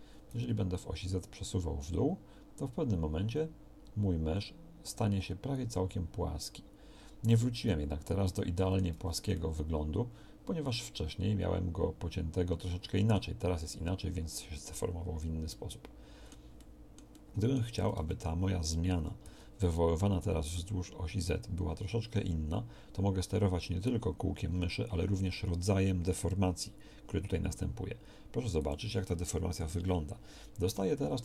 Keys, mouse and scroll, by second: 8.3 middle click, 8.9 Tab, 17.9 Tab, 18.9 g, 30.3 KP_1.